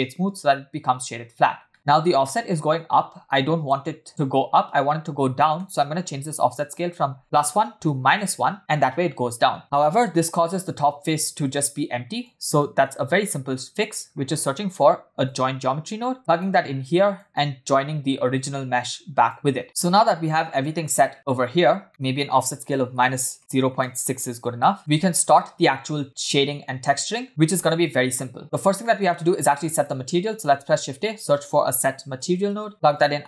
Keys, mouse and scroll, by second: 1.2-1.5 scroll down 1, 1.7 shift+middle click, 3.0-3.3 scroll up 1, 3.3 shift+middle click, 5.6 middle click, 6.6-8.3 drag, 12.2 click, 13.0 shift+a, 16.8 click, 18.4-19.4 drag, 19.6 scroll down 4, 19.6 space, 20.0-20.7 scroll up 5, 21.1-21.6 scroll down 2, 21.6 space, 21.9-24.8 drag, 21.9 middle click, 23.1 BackSpace, 23.2 BackSpace, 24.8 scroll up 3, 25.0-25.4 shift+middle drag, 26.9 click, 27.3 space, 28.4-29.0 scroll down 4, 28.8 middle click, 29.5 click, 30.0 scroll up 1, 30.3 shift+a.